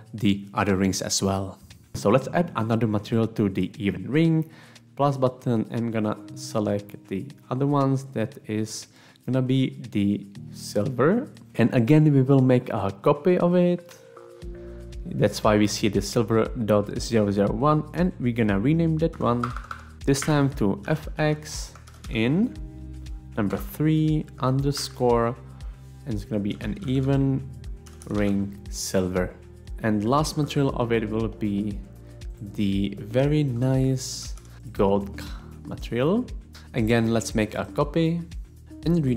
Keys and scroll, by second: 19.3 Right, 19.9-25.2 typing, 20.2 Home, 26.3-28.8 typing, 29.6 Return, 34.3-35.0 typing, 38.6-39.1 typing.